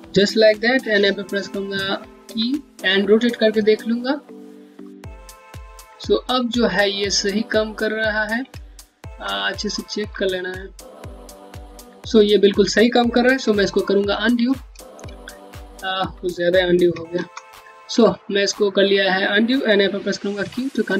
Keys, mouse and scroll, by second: 2.3 e, 4.4 e, 4.4 click, 8.3 alt+click, 8.6-9.4 typing, 9.0 scroll up 1, 9.4 middle click, 9.9 scroll up 1, 13.6 scroll down 1, 13.9 typing, 14.6 scroll down 1, 14.9 alt+click, 17.4 scroll down 1, 17.7 alt+click, 20.1 q, 20.6 scroll down 1.